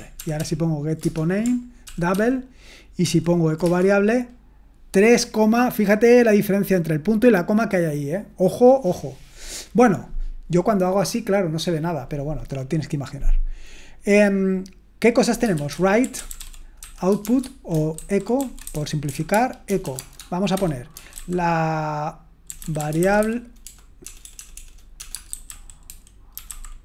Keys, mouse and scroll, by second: 0.0-0.1 typing, 0.1 Return, 3.0 Return, 15.3-26.8 typing, 17.9 ctrl+w.